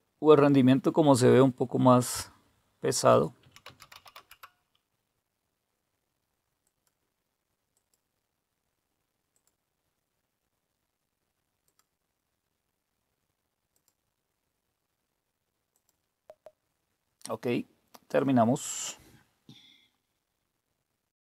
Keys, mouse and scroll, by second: 3.2-4.4 typing, 6.6 click, 7.7 click, 8.0 typing, 9.3 click, 11.6 click, 13.7 click, 15.7 click.